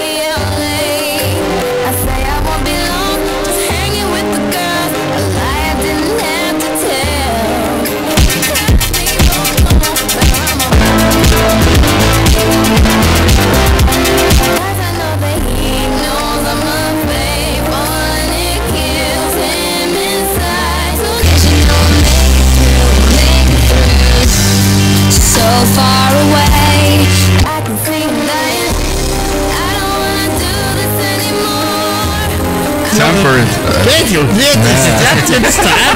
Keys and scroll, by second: 14.5 Page_Down, 27.3 Page_Down.